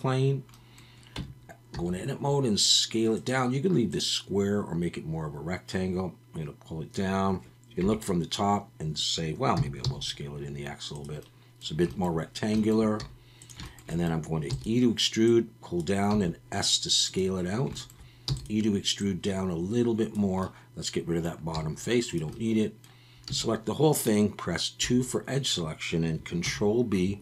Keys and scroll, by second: 1.1 Tab, 1.7 s, 7.8 KP_7, 9.5 s, 9.8 x, 13.0 s, 14.5 e, 16.1 s, 18.3 e, 21.5 x, 23.3 a, 24.8 2, 26.4 ctrl+b.